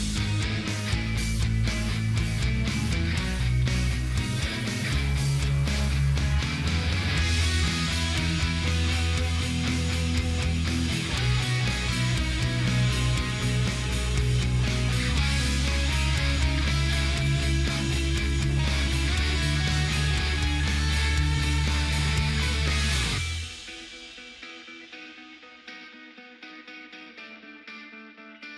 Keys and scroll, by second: 24.2 shift+a.